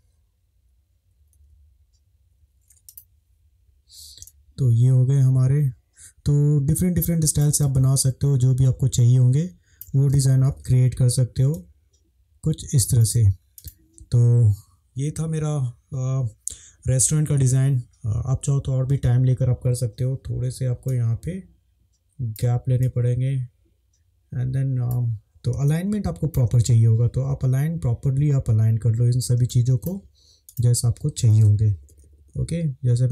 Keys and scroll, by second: 1.3 Right, 1.5 Right, 4.3 space, 10.4 -, 25.2 shift+Right, 25.5 space, 29.5 space, 31.4 Left, 31.7 Left, 31.8 Left, 31.9 Left, 32.0 Left, 32.2 Left, 32.4 Left.